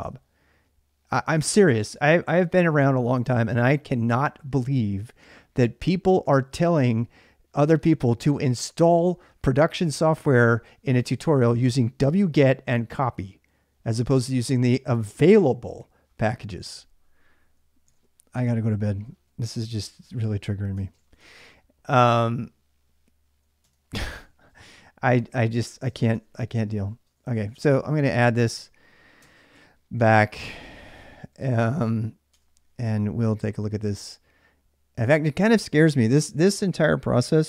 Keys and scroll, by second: 17.7 alt+Tab, 19.3-20.9 typing, 20.6 ctrl+[, 21.0 Return, 23.3-31.4 typing, 29.0 Tab, 29.7 ctrl+[, 31.6 Tab, 32.1 Return, 32.8-33.6 typing.